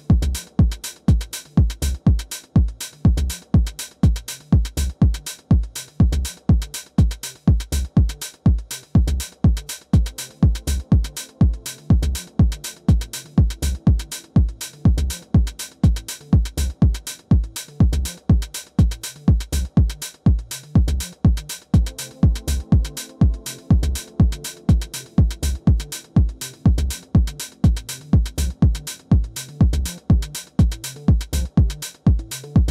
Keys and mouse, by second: 3.2 click, 6.9 click, 8.8 click, 10.1 click, 11.4 click, 23.9 click, 26.2 click, 27.5 click, 28.5 click, 31.1-32.7 drag.